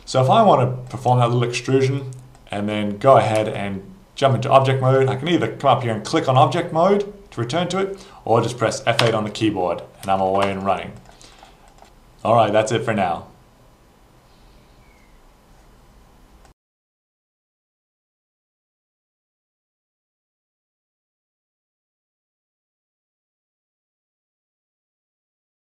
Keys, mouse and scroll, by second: 0.9 click, 2.3 click, 3.5 alt+click, 9.1 F8, 10.6 shift+click, 11.0 shift+click, 11.3 shift+click, 11.7 shift+click, 12.2 shift+click, 12.5 shift+click.